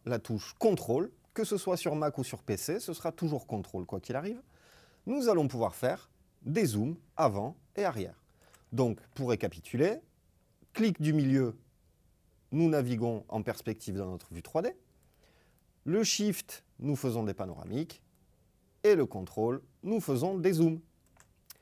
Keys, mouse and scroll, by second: 18.2 ctrl+middle drag.